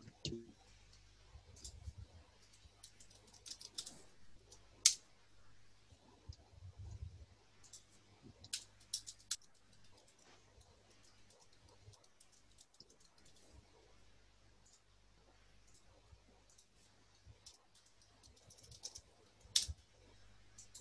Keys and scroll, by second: 2.2-4.4 typing, 4.9 Return, 8.3-13.6 typing, 16.8-19.3 typing, 19.7 Return.